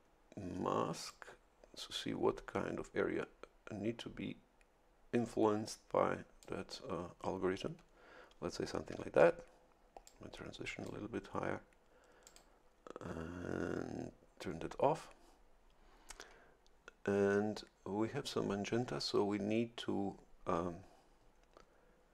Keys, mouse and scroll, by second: 1.1-6.6 drag, 10.0-11.0 drag, 12.2 click.